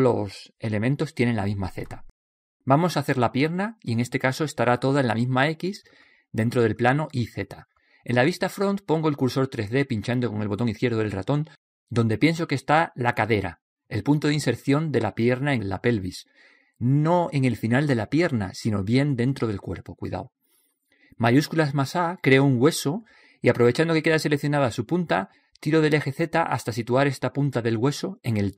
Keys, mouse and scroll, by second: 0.5-6.1 middle drag, 20.8 click, 21.4-23.8 middle drag, 23.5 shift+a, 24.9 click, 26.6-28.5 middle drag, 28.0 KP_1.